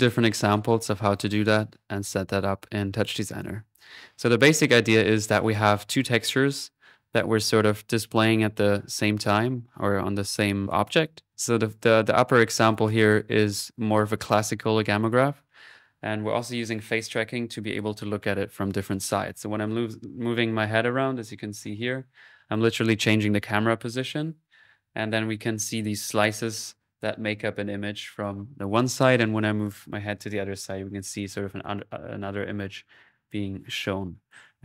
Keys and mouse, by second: 11.4 middle click, 12.7 click.